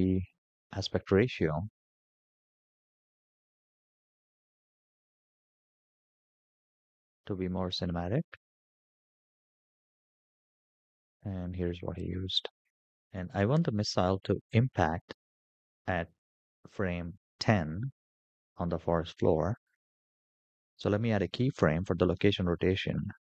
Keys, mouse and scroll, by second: 1.2 click, 2.2-3.9 drag, 3.6 KP_0, 9.2 shift+middle drag, 9.4 n, 9.6 scroll up 8, 9.8 click, 10.1 shift+n, 10.2-11.3 shift+middle drag.